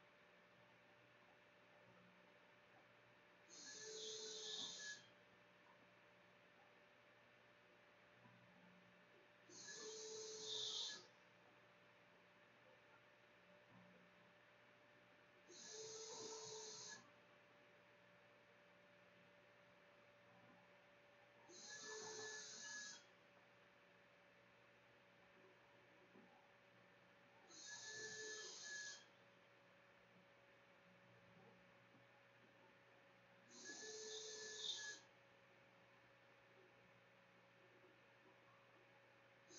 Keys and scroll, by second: 0.0-0.8 typing, 1.8-16.4 typing, 6.4 Tab, 24.4-39.5 typing, 26.4 Return.